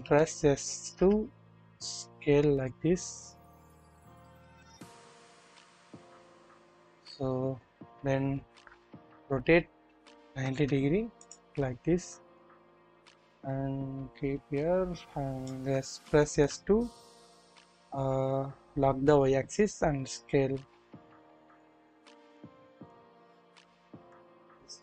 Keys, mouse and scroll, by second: 0.0 typing, 1.8 typing, 4.9 scroll up 1, 5.7-6.1 shift+middle drag, 7.5-8.6 scroll up 1, 8.6 typing, 11.6 typing, 12.4-15.6 drag, 15.6-16.3 typing, 17.4 typing, 22.3 click, 22.8 click, 23.6 click, 24.3-24.8 scroll down 1.